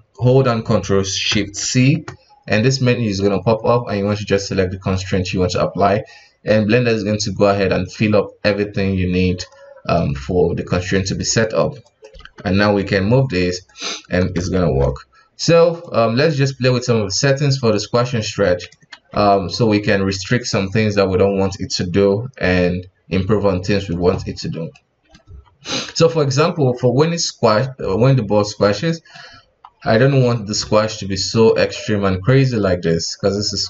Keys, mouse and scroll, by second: 1.7 ctrl+shift+c, 9.6-10.9 scroll down 4, 10.9-11.8 shift+middle drag, 11.8 right click, 12.1 g, 14.4 space, 15.8-18.9 drag, 18.9 ctrl+z, 24.7-25.3 middle drag, 25.3 KP_1, 26.4-28.8 drag, 28.8-29.2 middle drag, 29.2 scroll down 1, 29.4 KP_1, 29.9-30.3 scroll up 1, 30.3-31.6 middle drag, 31.6 KP_1, 32.2-33.6 drag.